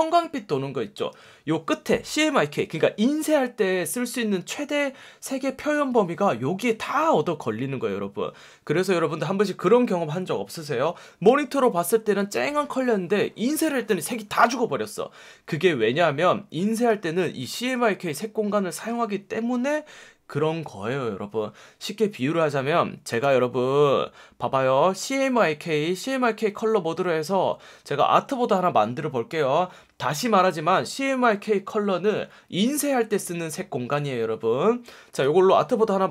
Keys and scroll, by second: 1.1 F1, 17.6 F1, 18.7 F1.